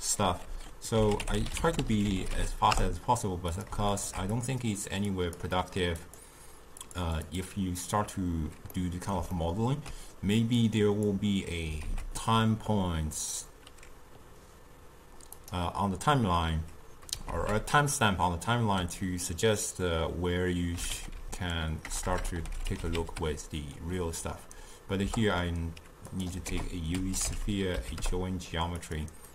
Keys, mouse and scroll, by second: 4.0-8.8 alt+shift+drag, 8.8-28.9 middle drag, 28.9 ctrl+a.